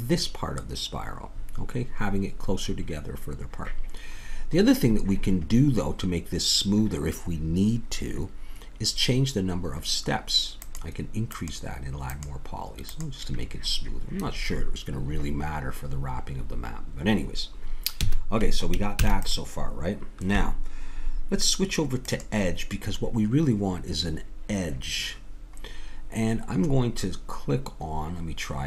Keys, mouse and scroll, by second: 4.2-8.2 middle drag, 10.6-14.7 drag, 18.0 a, 19.0 ctrl+s, 22.1-24.9 drag, 25.7-28.6 middle drag.